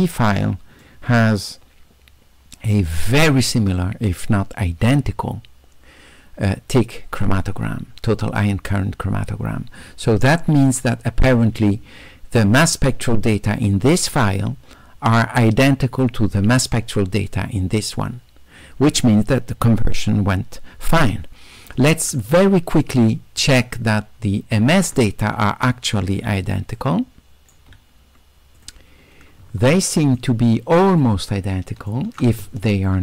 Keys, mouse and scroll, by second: 0.8-3.3 right drag, 22.4 middle click, 22.4 scroll up 2, 23.4 s, 23.6-24.7 right drag, 25.6 middle click, 26.3 s, 26.8-27.6 right drag, 28.6 click, 29.8 shift+right click, 31.0-31.9 shift+right drag.